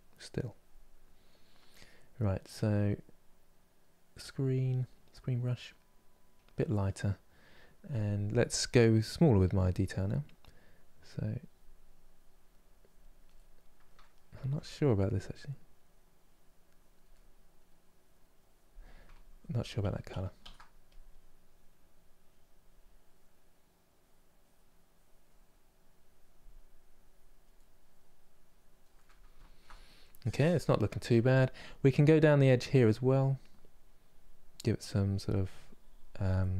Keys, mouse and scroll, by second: 8.2 f, 9.2-10.6 middle drag, 10.6-13.0 drag, 13.0-14.0 middle drag, 14.0 ctrl+z, 14.7-16.8 drag, 16.8 middle click, 17.5-18.9 drag, 18.9 ctrl+z, 19.2 ctrl+z, 19.5 ctrl+z, 20.1 ctrl+z, 20.5-27.2 drag, 27.2 middle click, 28.0 click, 28.6-32.7 middle drag, 32.7-35.7 drag, 36.1 middle click.